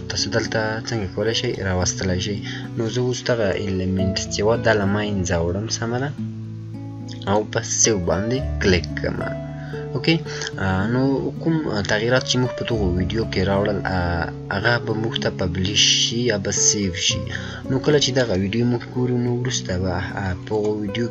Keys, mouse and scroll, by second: 1.4 click, 4.5 scroll up 1, 6.4-6.8 scroll up 1, 7.2 click, 15.7 click, 15.7-16.1 scroll down 1, 20.2 scroll down 1.